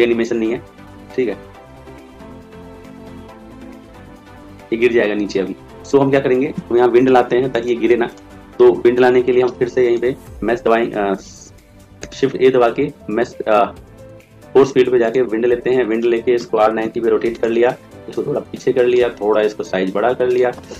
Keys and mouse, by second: 7.5 click, 9.8-11.2 right drag, 10.5 ctrl+a, 11.9 shift+a, 16.3 r, 18.0 click, 19.1 s.